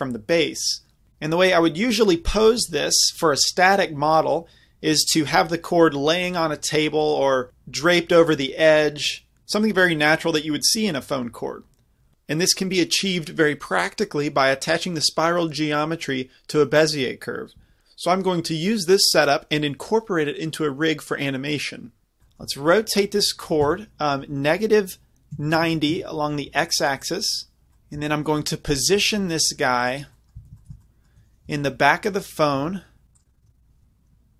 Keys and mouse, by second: 22.2-22.6 middle drag, 23.5 r, 27.7 z, 28.9 g, 29.9-30.9 drag, 30.4 z, 31.5 g, 33.3 g.